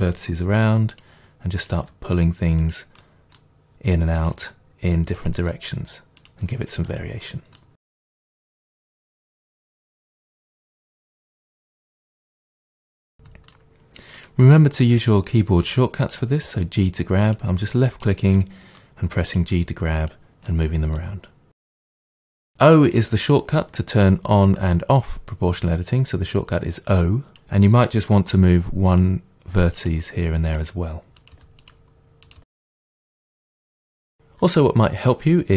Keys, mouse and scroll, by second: 0.5 g, 1.0 click, 1.6 click, 1.8 g, 2.7 click, 3.0-4.2 middle drag, 4.2 click, 4.4 g, 5.3 click, 5.5 middle click, 6.2 click, 6.5 g, 7.0 click, 7.3 middle click, 7.8-12.9 typing, 7.9 middle click, 8.1 middle click, 8.2 middle click, 8.3 click, 8.7 middle click, 8.9 middle click, 9.1 middle click, 9.2 middle click, 9.6 click, 9.7 middle click, 10.3 middle click, 10.3 click, 10.7 middle click, 10.9 middle click, 10.9 click, 11.1 middle click, 11.2 click, 11.5 middle click, 11.6 scroll up 2, 11.7 scroll down 2, 11.8 click, 12.2 middle click, 12.5 click, 12.9 click, 13.1-14.2 middle drag, 14.2 click, 14.5 g, 15.0 click, 15.3 middle click, 16.1 click, 16.4 g, 17.3 click, 17.5 g, 18.1 click, 18.4 middle click, 19.3 click, 19.4 g, 20.1 click, 20.5-21.6 middle drag, 21.6 click, 22.1 click, 22.2 g, 27.3 o, 27.3 click, 28.3 g, 29.0 click, 29.9 click, 29.9 g, 30.6 click, 31.2 click, 31.4 g, 32.3 click, 32.4-33.6 typing, 32.5 middle click, 32.9 middle click, 33.0 click, 33.2 click, 33.5 click, 33.7-35.5 middle drag.